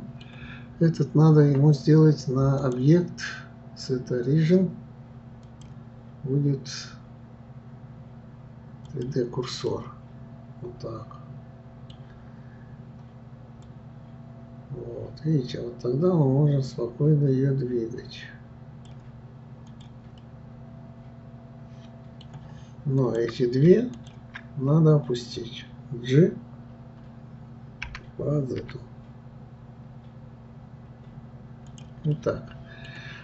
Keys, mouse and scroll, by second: 2.6-5.6 drag, 9.7-12.7 middle drag, 13.6-16.6 drag, 19.7 click, 20.2-23.0 middle drag, 23.0 click, 23.9 shift+click, 32.1-33.2 middle drag.